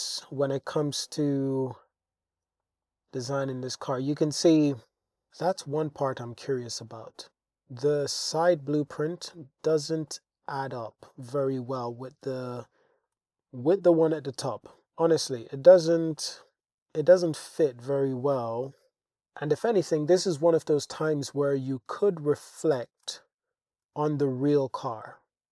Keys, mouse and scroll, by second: 2.6 shift+drag, 3.4 shift+drag, 5.3 Tab, 8.2 click, 9.7 shift+scroll, 9.7-10.1 shift+drag, 10.7 shift+drag, 12.3 shift+drag, 13.9 middle click, 14.9 alt+z, 16.2-18.3 middle drag, 21.9 click, 23.1 Tab, 23.9 Tab, 24.2 shift+click.